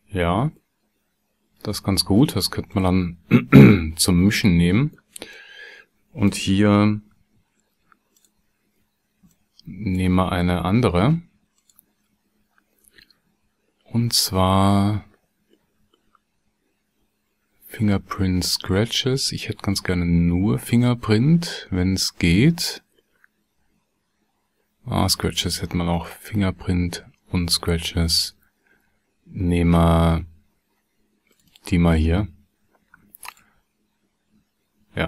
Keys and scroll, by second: 7.4 shift+d.